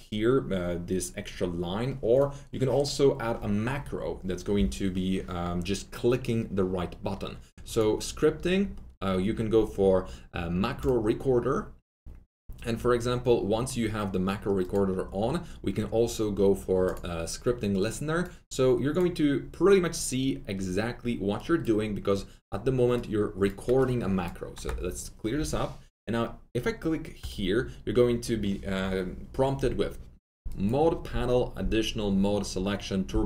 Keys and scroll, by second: 24.5 BackSpace.